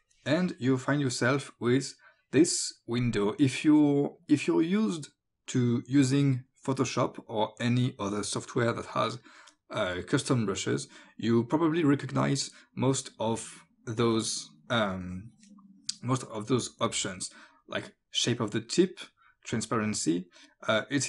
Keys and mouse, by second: 2.4 click, 7.6 click, 18.2 click.